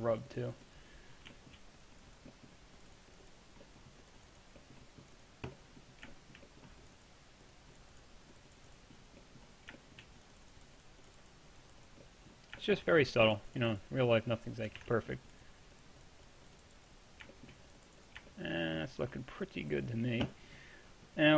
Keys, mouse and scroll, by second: 0.3-1.4 middle drag, 1.6-2.4 middle drag, 14.9 ctrl+z, 15.0 middle drag, 15.1 middle click, 17.4 middle click, 17.6-18.9 drag, 18.9-21.3 middle drag.